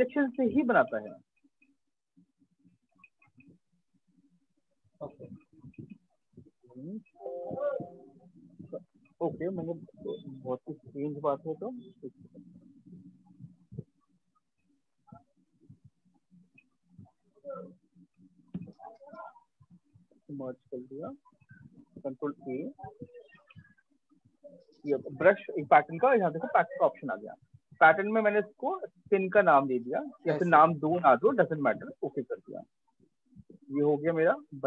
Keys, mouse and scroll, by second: 0.2 ctrl+click, 0.4 ctrl+click, 2.7 click, 6.4 ctrl+d, 7.5 click, 8.5 ctrl+d, 11.3 click, 13.4 click, 15.6 click, 17.4 click, 18.0 click, 19.7 ctrl+e, 21.7 ctrl+a, 23.2 click, 26.0 click, 29.2 click, 31.2 click, 32.8 click, 34.2 click.